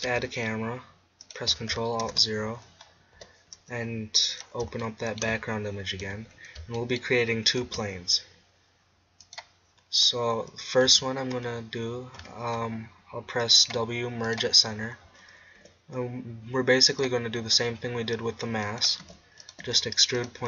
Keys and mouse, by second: 0.0-0.7 drag, 0.0 shift+a, 2.0 ctrl+alt+KP_0, 3.2 n, 4.4 click, 6.0 n, 7.6 shift+a, 10.4 middle click, 10.8 Tab, 12.2 w, 15.6 g, 17.0-17.6 drag, 17.6 g, 18.8 click, 18.9 right click, 19.0-20.4 typing, 19.5-20.4 drag.